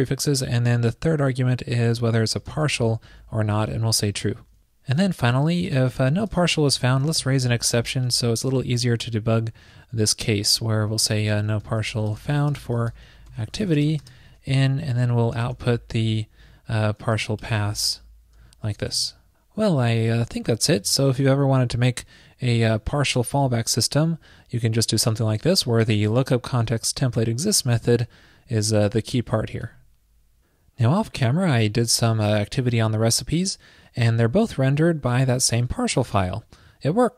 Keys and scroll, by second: 18.9 super+s.